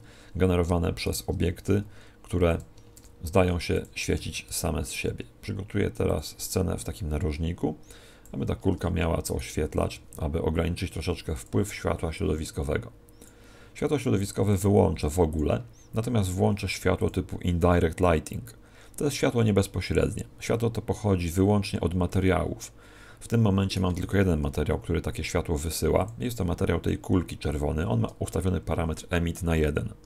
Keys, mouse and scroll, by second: 1.0 right click, 1.6 s, 2.5 click, 3.0 shift+d, 4.1 click, 4.1 r, 9.2 right click, 9.8 g, 11.4-18.8 click, 23.6 right click, 24.4 g, 26.0 click.